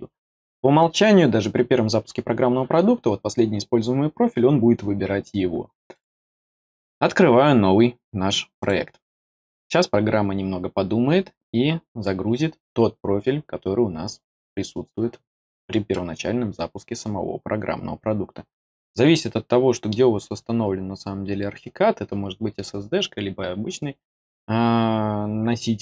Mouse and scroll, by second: 5.9 click, 8.5 click.